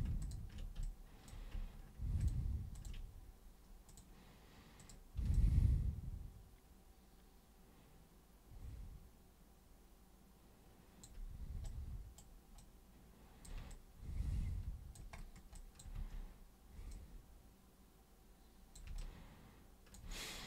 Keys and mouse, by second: 0.2 ctrl+shift+super+click, 0.8-1.3 alt+super+drag, 2.2 ctrl+shift+super+click, 2.7 ctrl+shift+super+click, 3.8 super+click, 4.8 super+click, 5.3-11.0 alt+super+drag, 11.6 super+right click, 12.6 super+click, 13.7-14.9 alt+super+drag, 15.5 alt+super+click, 15.9 super+w, 16.9-18.7 super+drag, 18.9-19.9 alt+super+drag.